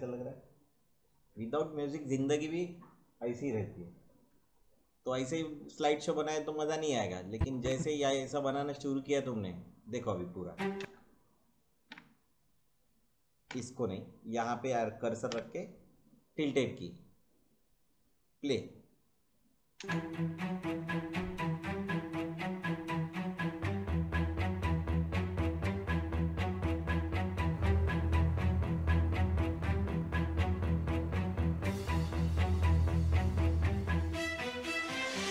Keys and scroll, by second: 8.8 space, 10.8 space, 11.9 `, 13.4 `, 15.3 `, 19.7 space.